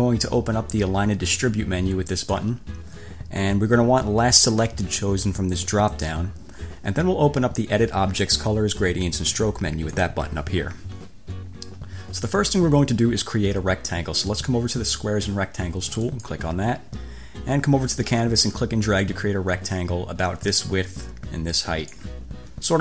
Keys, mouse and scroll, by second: 2.3 click, 4.7 click, 6.1 click, 10.1 click, 16.3 click, 18.4-22.3 drag.